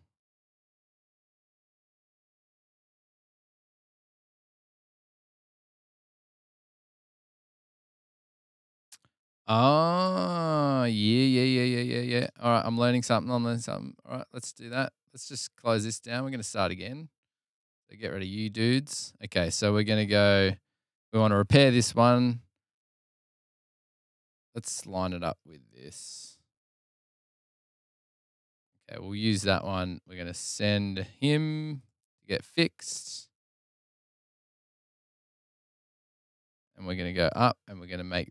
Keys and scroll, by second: 11.5 super+Tab, 18.1 super+Tab, 35.8 super+Tab, 37.2 p.